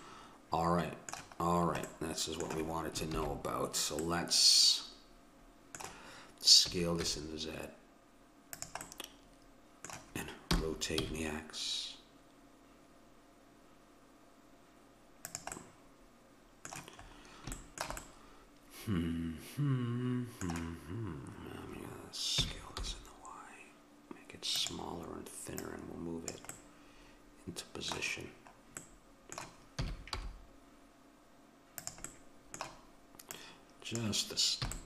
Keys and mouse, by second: 0.1 middle click, 3.2 ctrl+z, 5.5 middle click, 6.7 s, 8.9-10.5 middle drag, 10.5 r, 15.6-19.0 middle drag, 22.4 s, 25.7-27.3 drag, 27.3 middle click, 28.9 middle click, 29.8 s, 29.9-31.8 middle drag, 32.2 middle click, 33.4-34.8 drag, 34.7 a.